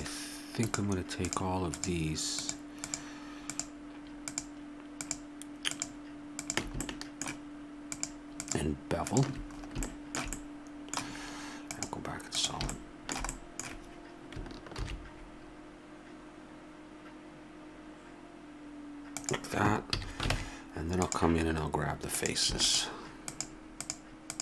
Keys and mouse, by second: 6.8-9.6 middle drag, 9.6-11.2 drag, 11.7 click, 14.7 ctrl+b, 19.9 a, 20.3 ctrl+Tab.